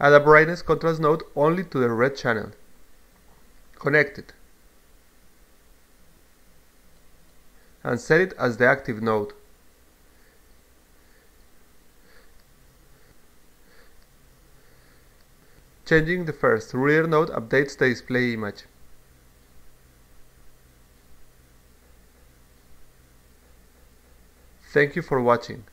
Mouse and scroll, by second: 0.5 click, 1.1-3.0 drag, 4.4-5.1 drag, 6.3-7.5 drag, 8.1 click, 8.3 click, 10.1-11.7 drag, 12.4-15.0 drag, 16.5-17.7 drag, 18.7-19.6 drag, 20.7-21.9 drag.